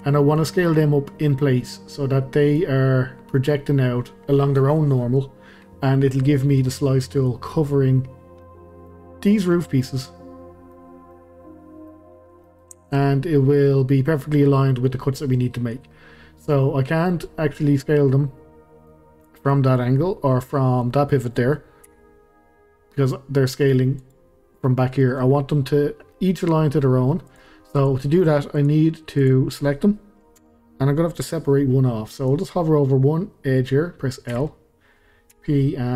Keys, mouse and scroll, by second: 5.8 scroll down 2, 6.1-12.1 middle drag, 12.1 scroll down 2, 12.4-13.1 middle drag, 13.1 scroll up 2, 13.3-15.1 middle drag, 15.1 scroll down 2, 15.3-16.1 middle drag, 16.1-16.6 scroll up 2, 16.6-21.8 middle drag, 21.8 s, 25.0-27.3 middle drag, 27.3 click, 27.8 click, 28.6 click, 29.2 click, 30.4 Tab, 34.3 l, 35.3 p.